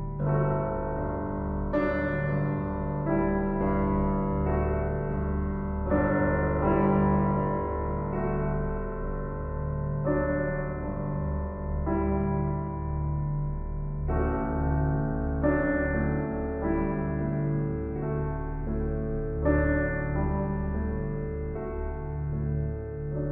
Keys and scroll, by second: 14.7 ctrl+t.